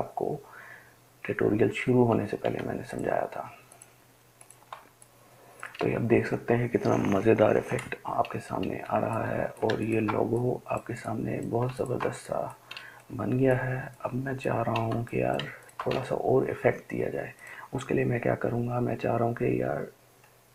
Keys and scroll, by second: 2.9 ctrl+space, 3.4-6.0 ctrl+space, 9.6 ctrl+space, 9.8 ctrl+space, 9.8 ctrl+space, 10.0 ctrl+space.